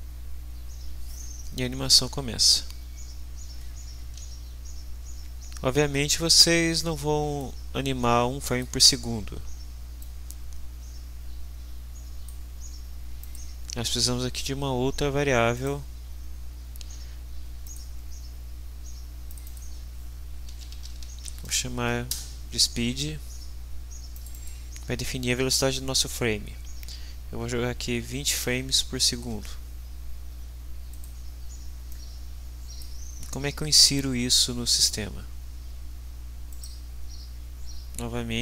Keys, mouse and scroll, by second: 4.2 ctrl+s, 7.4-8.8 middle drag, 10.0-12.4 drag, 13.2 click, 15.6 right click, 17.6 click, 19.3 click, 20.2-21.7 typing, 22.1 Return, 24.2 click, 28.1 2, 28.4 0, 29.3 Return, 30.9 click, 31.9-33.0 drag, 36.5 right click.